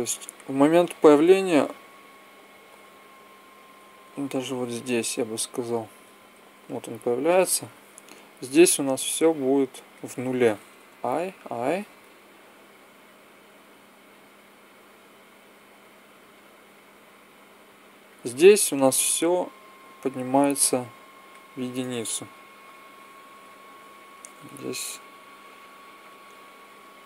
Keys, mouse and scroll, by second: 0.0 Left, 1.7 Left, 2.5 Left, 3.1 Left, 3.8 Right, 4.0 Right, 4.2 Right, 5.1 Left, 5.5 Right, 5.8 Right, 6.4 Left, 10.7 i, 11.2 i, 12.7-14.0 drag, 20.0-21.2 drag, 22.4 i, 25.8 i, 26.9-27.0 drag.